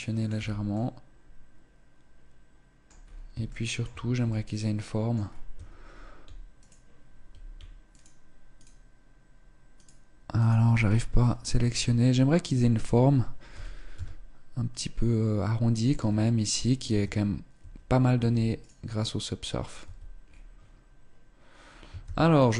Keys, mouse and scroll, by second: 0.1 Tab, 0.4 middle click, 2.8 scroll up 3, 3.2 shift+middle click, 4.0 middle click, 5.0 scroll up 2, 5.2 Tab, 6.3 alt+right click, 7.6 alt+right click, 8.2 alt+right click, 9.4 alt+right click, 10.1 alt+right click, 10.6 scroll up 3, 10.9 shift+middle click, 12.1 alt+right click, 13.2 g, 15.7 Tab, 16.7 Tab, 17.3 Tab, 17.9 Tab, 18.3 right click, 18.7 middle click, 19.5 Tab, 19.9-20.7 scroll down 3, 21.4 scroll down 2, 21.8 ctrl+s.